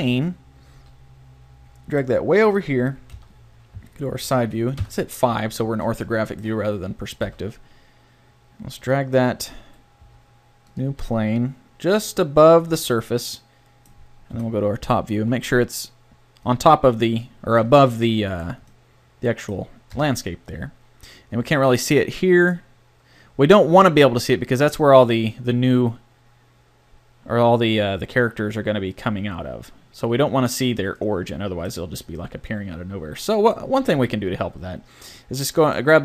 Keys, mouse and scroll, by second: 0.5-2.2 middle drag, 0.7 g, 3.1 KP_1, 3.7 KP_3, 4.8 KP_5, 5.6 middle click, 7.2 g, 8.9 click, 10.0 s, 11.0 g, 12.5 click, 12.7 middle click, 14.3 KP_7, 15.1 g, 19.9 KP_0, 34.0 Tab.